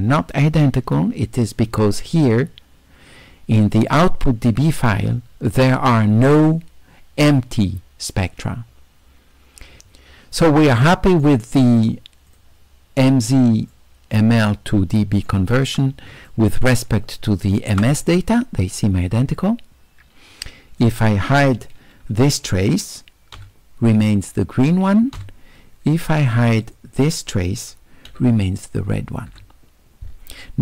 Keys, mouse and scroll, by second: 2.2 click, 10.4-11.2 right drag, 12.3 click, 13.7-15.3 right drag, 16.3 shift+right drag, 17.3-17.7 shift+right drag, 20.8 click, 26.7 click.